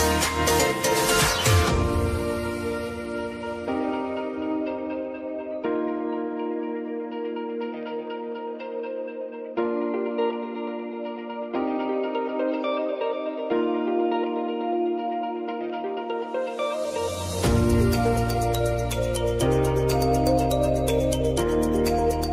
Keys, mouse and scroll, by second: 8.4 click, 10.8 click, 18.9-22.3 drag.